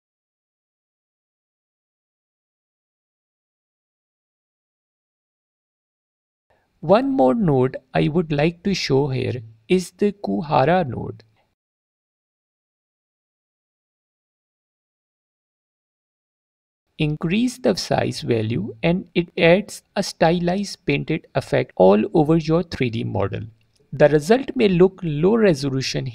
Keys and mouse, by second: 0.8 click, 1.3 click, 6.1 click, 6.6 click, 7.2 click, 7.6 alt+click, 8.2 drag, 10.0 click, 11.1 click, 12.8 click, 13.2 shift+a, 21.5 click, 22.9-25.7 drag.